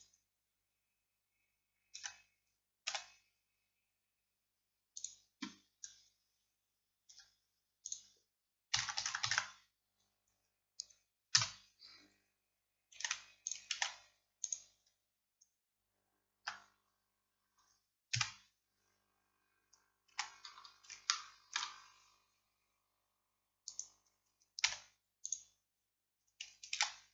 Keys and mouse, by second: 2.0 Tab, 2.9 s, 7.2 Tab, 7.9-10.4 drag, 13.0 ctrl+a, 16.5 Tab, 18.2 KP_7, 20.2 z, 24.7 x, 26.8 ctrl+z.